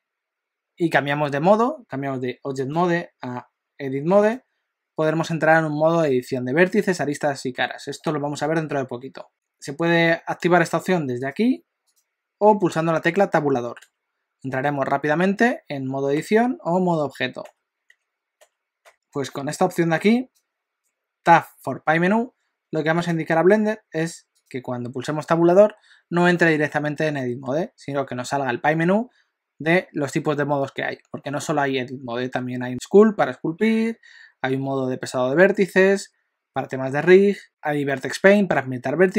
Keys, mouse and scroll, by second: 2.6 click, 11.2 click, 13.8 Tab, 16.2 Tab, 17.9 Tab, 18.9 F4, 27.5 Tab.